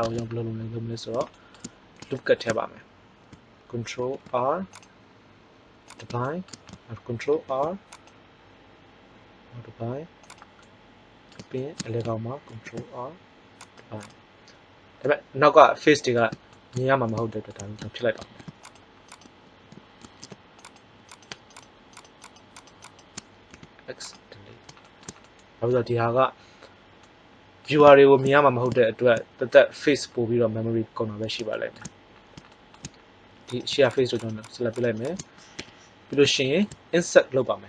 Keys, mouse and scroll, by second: 3.8 ctrl+r, 5.8-7.1 drag, 7.3 ctrl+r, 12.4 ctrl+r, 18.2 ctrl+Tab, 20.0 ctrl+Tab, 21.1-24.2 drag, 23.6 x, 35.5 KP_1.